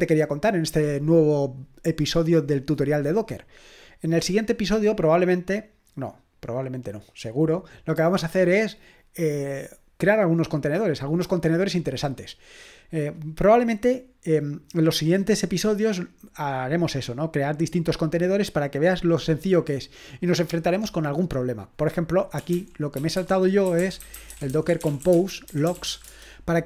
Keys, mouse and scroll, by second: 22.1-26.4 typing.